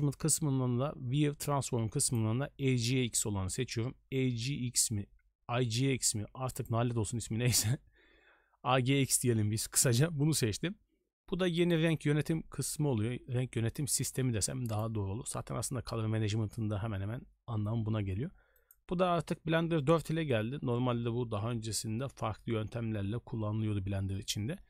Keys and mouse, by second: 2.1-6.7 drag, 11.7-14.9 drag, 18.5-24.6 drag.